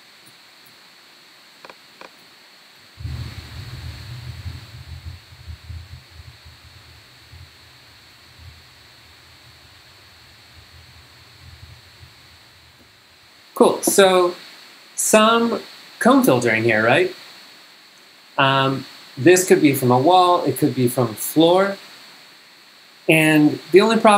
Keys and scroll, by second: 2.3 super+Tab, 2.8 super+g, 3.3 g, 3.9 v, 12.8 g.